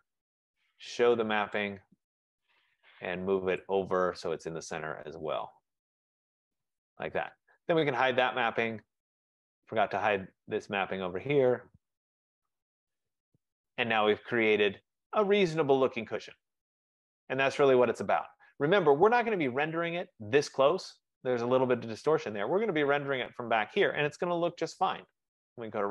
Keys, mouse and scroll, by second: 1.3 F15, 1.7 click, 6.6 click, 8.6 click, 9.7 click, 10.9 click, 12.7 click, 13.7 click, 15.4 right click, 16.0 middle click, 16.6 middle click, 17.0 middle click, 17.5 middle click, 17.6-18.6 scroll up 5, 18.6-19.2 scroll down 1, 19.5-20.4 scroll up 2, 20.4 scroll up 1, 22.6-23.3 scroll down 7, 23.4 scroll.